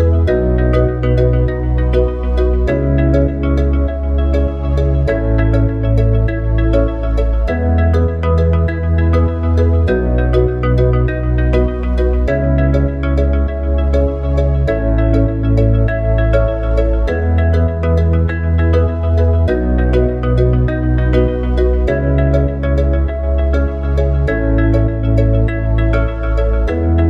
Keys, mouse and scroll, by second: 19.7 click, 20.9 s.